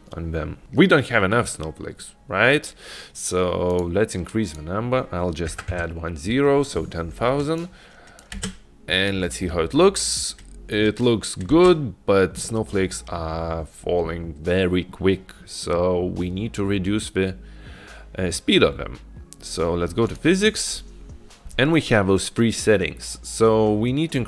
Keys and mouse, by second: 3.8-6.4 drag, 7.9 click, 8.6 space, 11.7 space, 20.2 drag, 20.4 click.